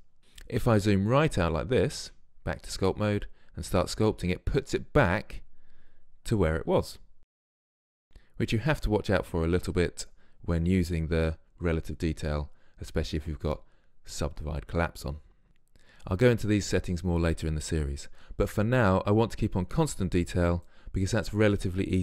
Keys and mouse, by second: 0.7 middle click, 0.8 middle click, 2.1 Tab, 3.3-4.9 drag, 7.2 middle click, 8.5-22.0 drag.